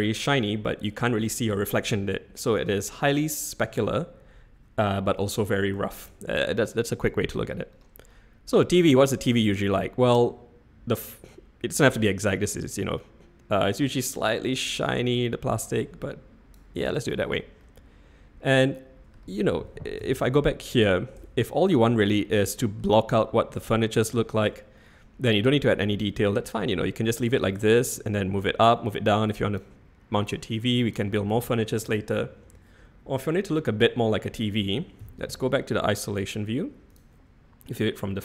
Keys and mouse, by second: 5.9 drag, 8.1-9.0 middle drag, 11.4-14.2 drag, 14.6-16.5 drag, 16.8 middle click, 17.6-19.1 middle drag, 20.2 /, 21.2-22.0 shift+middle drag, 22.3-22.7 middle drag, 24.2-24.5 shift+middle drag, 27.5 middle click, 28.6 click, 30.3 click, 31.4 ctrl+z, 35.0 /.